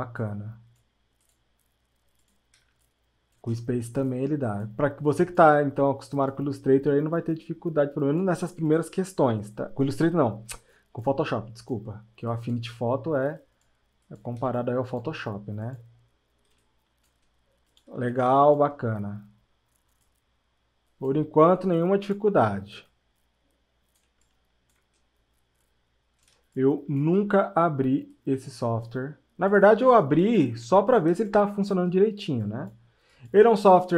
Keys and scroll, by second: 2.7 space, 8.9 space, 14.5 space.